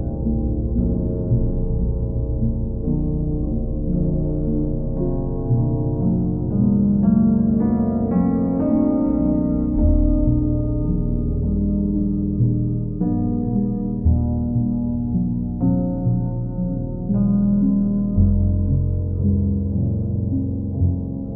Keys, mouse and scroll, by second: 0.5 alt+click, 2.9 alt+click, 3.9 ctrl+click, 4.3 ctrl+click, 6.6 click, 8.1 ctrl+click, 9.3 ctrl+click, 9.8 ctrl+click, 12.5 click, 13.1 ctrl+click, 13.7 alt+click, 15.1 alt+click, 18.6 click, 19.4 ctrl+click, 20.0 click, 20.3 shift+click.